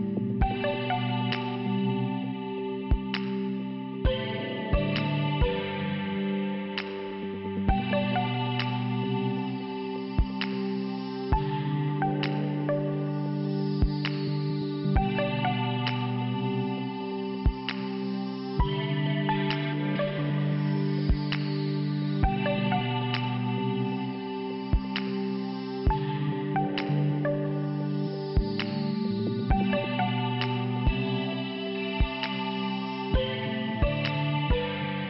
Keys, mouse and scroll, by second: 0.5 click, 1.4 click, 1.6 click, 1.9 Return, 2.9 click, 4.8 click, 4.9 click, 5.6 scroll down 1, 6.7 click, 6.9 click, 7.8 click, 10.6 5, 14.9 click, 15.5 click, 15.8 click, 16.3 click, 17.4 click, 18.5 click, 18.6 click, 20.2 click, 21.4 click, 23.6 click, 23.6 click, 25.7 click, 30.8 click, 31.1 click, 31.8 right click, 33.2 click, 34.7 click.